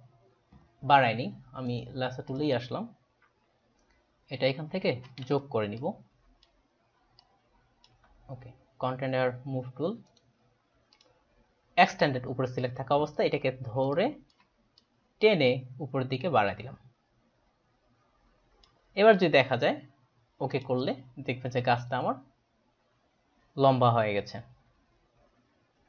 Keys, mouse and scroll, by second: 1.8 right click, 2.2 click, 5.9 shift+click, 7.2 shift+click, 10.2 right click, 10.9 click, 13.8 space, 14.0 click, 14.7 click, 14.9 click, 20.6 click.